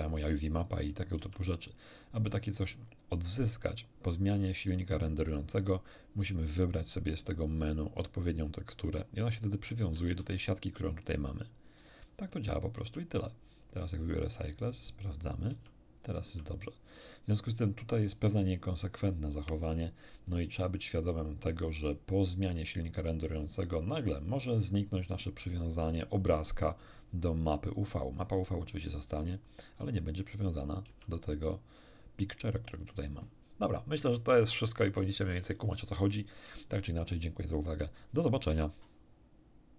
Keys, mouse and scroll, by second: 1.1 Tab, 6.2 click, 8.7 click, 10.1 a, 12.7 Tab, 13.7 click, 14.7 click, 15.5 Tab, 16.2 Tab, 30.8 Tab, 39.7 q.